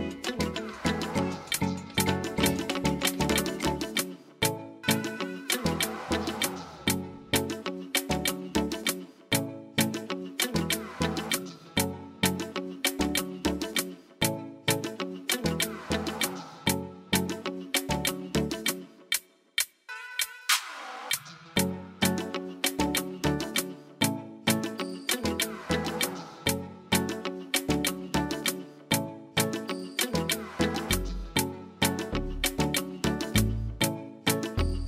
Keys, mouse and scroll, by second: 2.9 click, 10.8 click, 12.9 click, 15.9 click, 23.0 click, 23.4 click, 24.1 click, 30.3 click, 31.1 click.